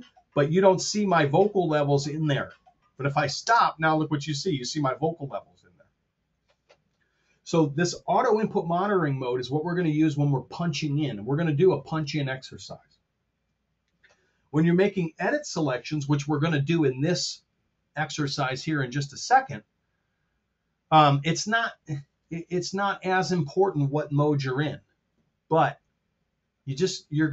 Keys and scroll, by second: 3.4 space.